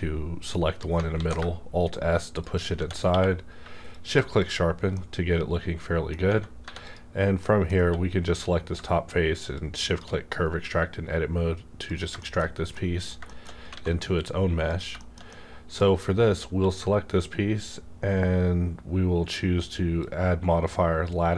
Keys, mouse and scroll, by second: 1.1 alt+s, 2.4 shift+click, 2.7 alt+s, 2.7 Tab, 3.0 q, 3.9 shift+click, 4.4 shift+click, 4.7 scroll down 1, 4.9-6.6 middle drag, 6.6 3, 6.8 click, 6.8 click, 7.4 middle click, 7.8 q, 9.5-12.1 shift+drag, 12.1 middle click, 12.2 shift+scroll down 1, 12.7 shift+middle click, 12.8 scroll down 1, 13.7 alt+a, 14.6 click, 15.0 middle click, 15.3 middle click, 16.4 q, 20.3-21.3 drag.